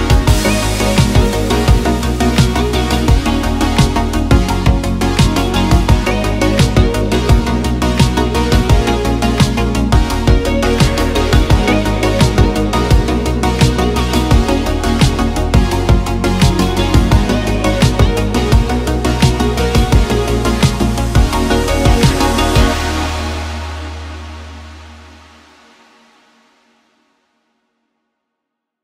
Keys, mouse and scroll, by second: 0.6 x, 1.6 middle drag, 2.3 click, 2.5 click, 2.7 x, 3.4 shift+s, 4.4 click, 9.9-11.1 drag, 11.8 click, 12.8 super+s, 13.1 click, 19.2 middle drag, 19.9-20.3 middle drag, 23.5-25.7 middle drag, 25.7 click, 26.5 click, 27.1 middle click.